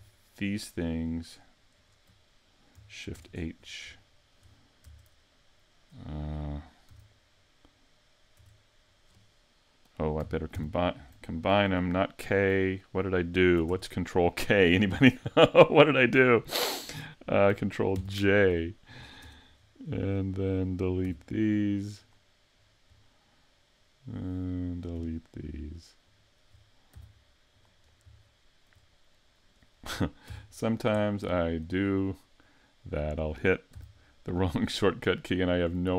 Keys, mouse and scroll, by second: 0.3 shift+right click, 1.1 shift+right click, 1.7 shift+right click, 3.1 shift+h, 3.6 scroll up 4, 4.0 shift+middle click, 4.8 Tab, 7.0 a, 7.3 scroll down 4, 8.4 Tab, 10.5 ctrl+k, 13.7 z, 17.9 ctrl+j, 19.2 Tab, 19.6-21.0 scroll up 4, 19.9 middle click, 21.0 x, 22.6 scroll down 3, 23.0 middle click, 24.7 right click, 26.1 shift+right click, 26.9 x, 27.8-28.1 scroll up 3, 28.2 shift+middle click, 29.3 right click, 30.3 x, 30.9-31.3 scroll down 2, 31.3 shift+middle click, 32.0-32.5 scroll up 1, 32.5 scroll up 1, 33.0 right click, 33.7 x, 34.8 middle click.